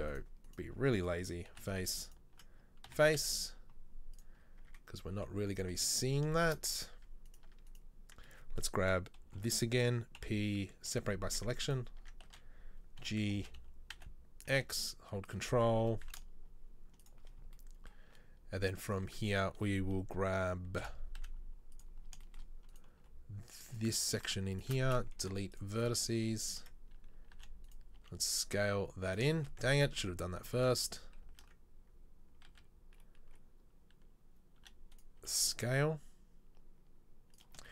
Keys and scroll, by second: 1.7 f, 3.0 f, 3.4 z, 4.8 Tab, 6.8 Tab, 7.1 Tab, 7.5 Tab, 9.4 ctrl+l, 10.3 p, 11.5 Tab, 12.0 Tab, 12.4 a, 13.5 g, 15.9 g, 20.8 KP_7, 21.3 z, 23.1 b, 25.3 Delete, 27.5 e, 28.0 s, 29.9 ctrl+z, 30.7 ctrl+z, 30.9 ctrl+z, 31.3 ctrl+z, 32.7 a, 34.7 e, 35.3 s.